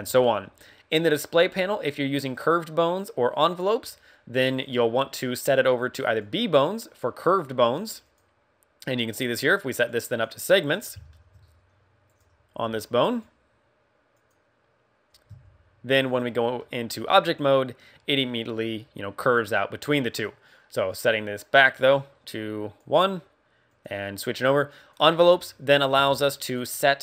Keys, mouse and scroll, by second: 15.7 right click, 15.7 click, 15.7 Tab, 15.7 r, 16.5 middle click, 20.9 click, 21.8 click, 24.7 click, 25.0-25.4 scroll down 3, 25.3 middle click, 25.9 Tab, 26.4 right click, 26.7 middle click.